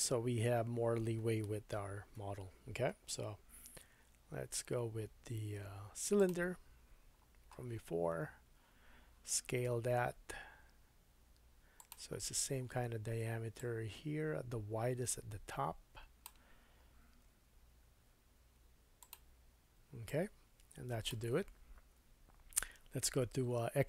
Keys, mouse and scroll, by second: 3.6 shift+a, 7.1-9.3 scroll down 4, 9.5 shift+super+s, 11.9-13.5 middle drag, 12.2-13.5 scroll up 3, 13.5-19.1 drag, 17.3 s, 19.1 middle click, 20.1-23.8 drag, 22.9 Tab.